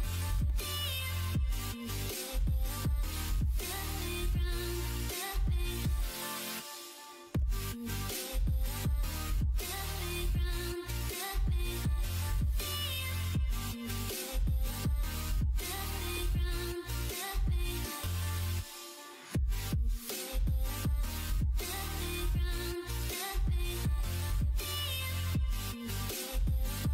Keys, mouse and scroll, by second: 0.4-2.3 middle drag, 7.7 middle click, 9.7 shift+d, 11.3 alt+s, 24.7 1.